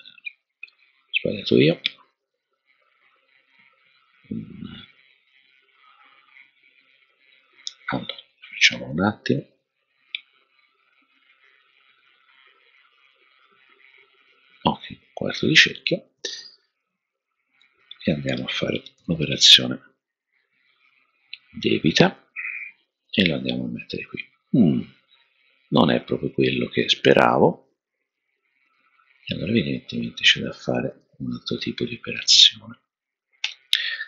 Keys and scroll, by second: 18.9 super+-, 33.4 BackSpace.